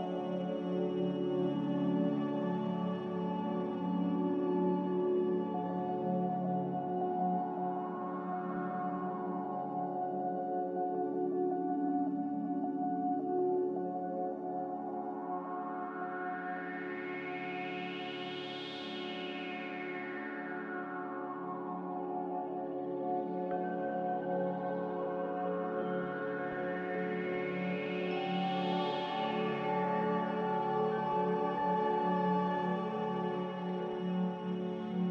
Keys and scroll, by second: 24.3 2, 28.1 a, 31.2 ctrl+c, 31.4 ctrl+v.